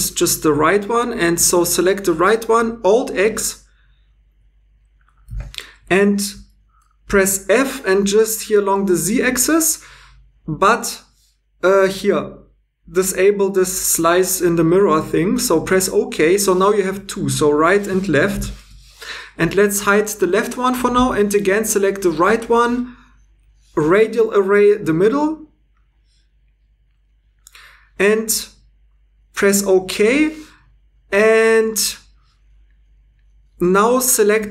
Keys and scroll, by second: 5.2 alt+x, 7.5 f, 18.3 shift+l.